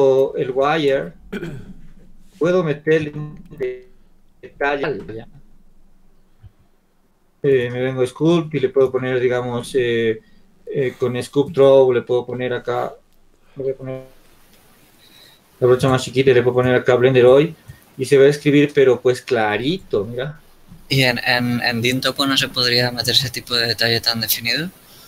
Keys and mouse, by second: 14.9 f, 15.7-20.2 drag, 20.7 click, 21.8-23.5 drag, 23.9-25.0 drag.